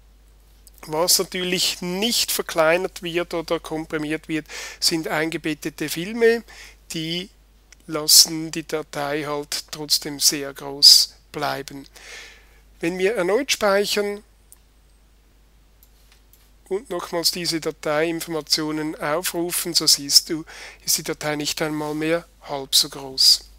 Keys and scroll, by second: 12.9 super+s.